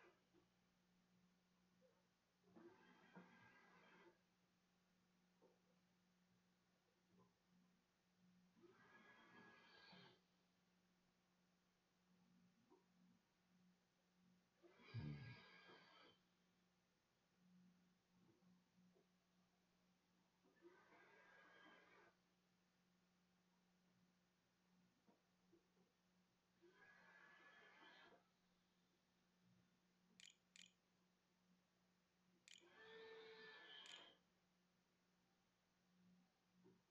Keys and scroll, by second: 30.0 Delete, 30.3 Delete, 30.6-32.3 typing, 33.6 ctrl+s.